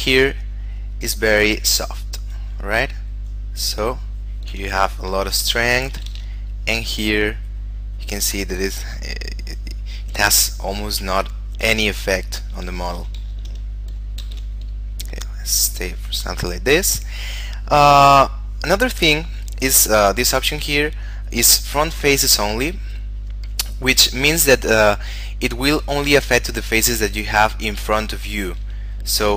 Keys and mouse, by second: 3.3 click, 5.1 ctrl+z, 6.3 shift+f, 7.4 click, 11.8 click, 13.1 ctrl+z, 14.4 shift+f, 15.6 click, 20.3 click, 29.1 shift+middle click.